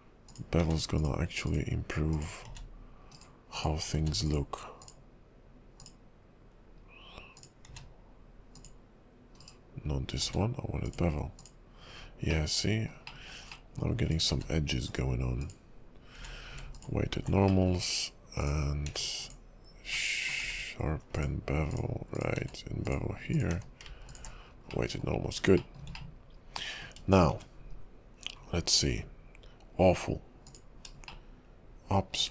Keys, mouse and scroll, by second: 0.3 click, 0.6 q, 2.1 click, 2.4 q, 3.1 right click, 3.6 click, 3.9 q, 5.8 click, 7.4 click, 7.7 q, 9.4 right click, 10.2 q, 12.1-12.4 scroll down 1, 12.4 middle click, 13.2 shift+middle click, 13.7 middle click, 14.1 click, 14.3 q, 16.1 q, 17.6 middle click, 18.4 click, 18.9 q, 20.0 middle click, 20.4 q, 22.1 click, 22.4 q, 23.5 q, 24.6-24.9 scroll down 2, 24.9 middle click, 25.7 shift+middle click, 26.1 middle click, 27.1-27.4 scroll up 3, 28.5-28.8 scroll down 2, 30.5 click, 31.2 shift+middle click, 32.2 shift+scroll down 1.